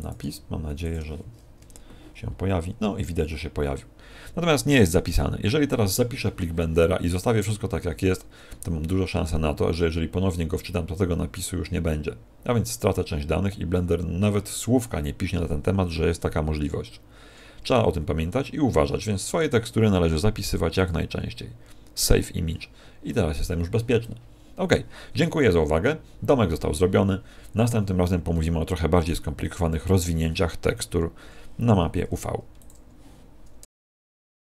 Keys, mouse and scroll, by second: 0.0 click, 0.1 g, 0.8 click.